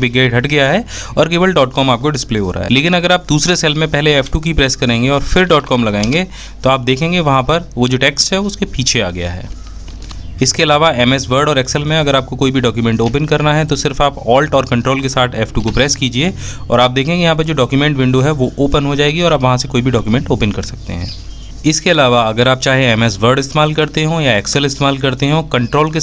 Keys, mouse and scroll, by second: 3.2 f, 3.4 F2, 10.7 a, 11.6 ctrl+alt+F2, 23.0 ctrl+F2.